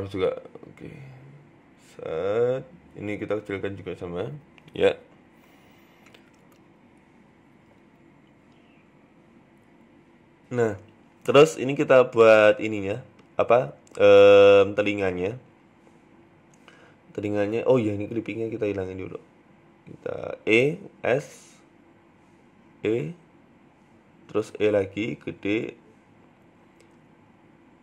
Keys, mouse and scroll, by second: 0.1 shift+click, 0.9 g, 2.9 s, 4.4 g, 5.1 Tab, 5.5 s, 6.4 middle click, 6.7 scroll down 4, 6.8 Tab, 7.0 middle click, 7.2 Tab, 7.4-9.1 scroll up 6, 7.6 shift+middle click, 7.8 Tab, 9.1 click, 9.1-9.4 scroll up 1, 9.8 right click, 10.2 scroll up 1, 10.5 shift+middle click, 11.5 e, 13.4 g, 14.9 click, 15.2 KP_1, 16.3 s, 17.2 ctrl+z, 18.2 click, 18.8 e, 19.0 s, 21.2 KP_1, 21.7 scroll up 2, 22.3 e, 24.1 e, 24.6 s, 25.7 KP_3, 26.3 shift+middle click, 27.6 g.